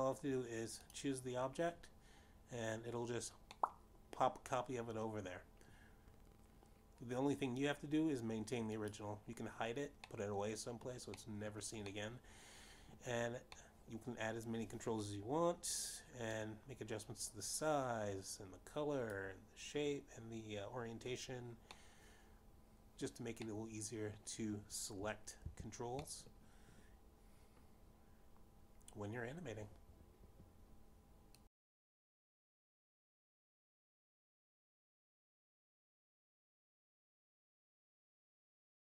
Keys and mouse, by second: 1.5 click, 3.7 click, 6.5 middle click, 11.6 click, 12.9 middle click, 14.1 middle click, 14.9 middle click, 16.5 middle click, 19.1 click, 24.6 middle click, 26.3 middle click, 28.4 shift+z, 29.1 middle click.